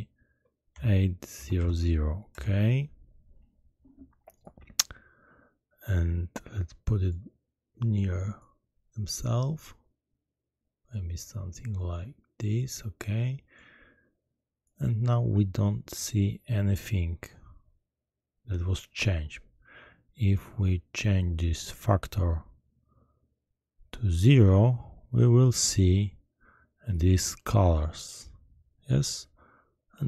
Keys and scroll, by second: 1.3 0, 1.5 0, 2.3 Return.